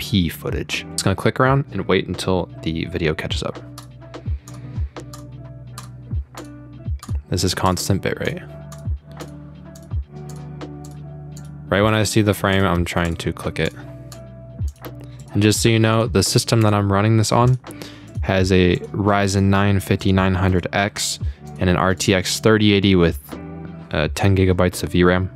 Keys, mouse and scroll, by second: 3.8 click, 4.5 click, 5.1 click, 5.8 click, 6.4 click, 7.0 click, 7.7 click, 8.3 click, 8.7 click, 9.2 click, 9.8 click, 10.3 click, 10.9 click, 11.4 click, 11.9 click, 12.5 click, 13.1 click, 13.7 click, 14.1 click, 14.7 click, 15.2 click, 15.9 click, 16.6 click, 17.5 click, 18.1 click, 18.8 click, 19.3 click, 20.0 click, 20.6 click, 21.5 click, 22.0 click, 22.4 click.